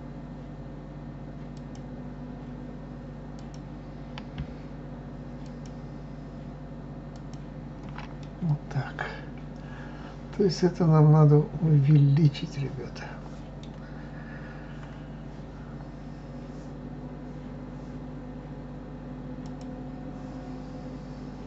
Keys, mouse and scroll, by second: 1.2 alt+click, 3.0 alt+click, 5.1 alt+shift+click, 6.8 alt+shift+click, 7.9-10.9 middle drag, 19.1 click.